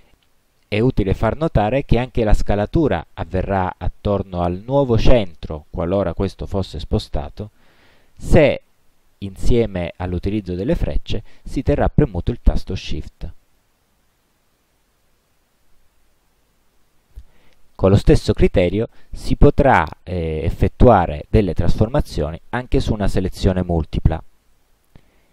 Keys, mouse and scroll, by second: 1.2-2.4 drag, 4.3 click, 7.8-15.8 drag, 24.6 shift+click.